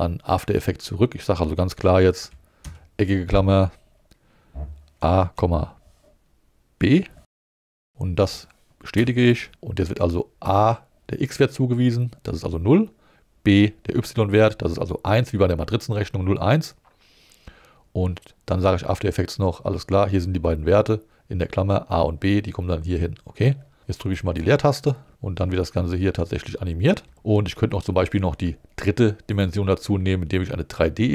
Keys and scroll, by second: 2.6 alt+5, 5.0 a, 5.3 ,, 6.8 b, 9.0 Home, 25.1 space, 27.0 space.